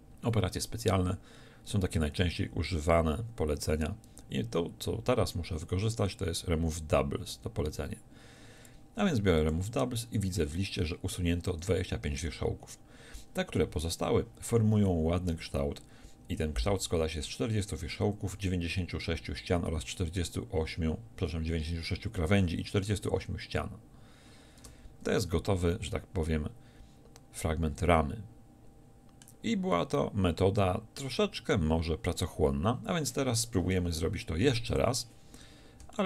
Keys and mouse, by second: 24.7 Tab, 25.6 z, 26.3-27.7 middle drag, 34.5 x.